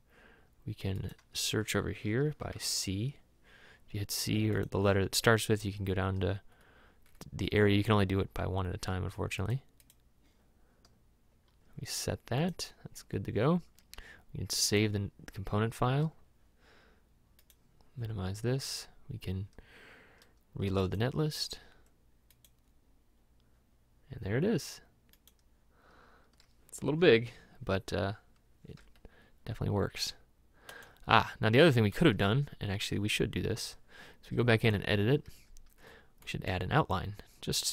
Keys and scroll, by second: 2.5 c, 28.8 m.